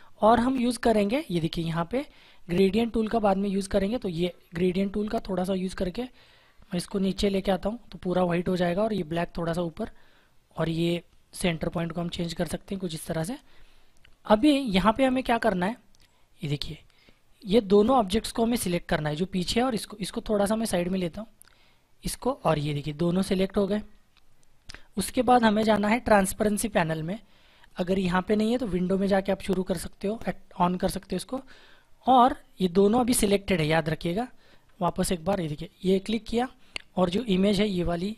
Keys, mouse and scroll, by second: 4.1 click, 20.2 click, 22.4 click, 27.8 click, 34.6 click.